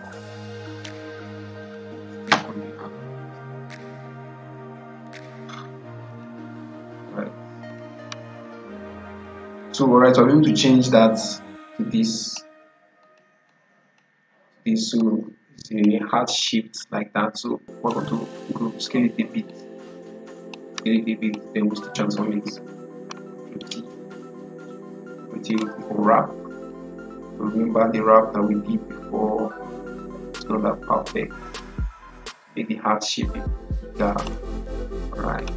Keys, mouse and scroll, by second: 6.0-22.3 drag, 22.3 ctrl+t, 23.5 right click, 25.4-35.5 drag.